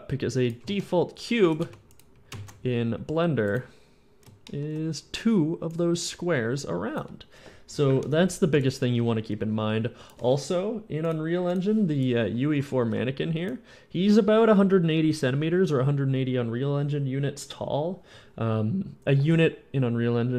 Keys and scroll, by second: 0.6 alt+Tab, 1.4 x, 1.7 x, 2.3 a, 5.4-6.8 typing, 8.3 d, 12.7 a.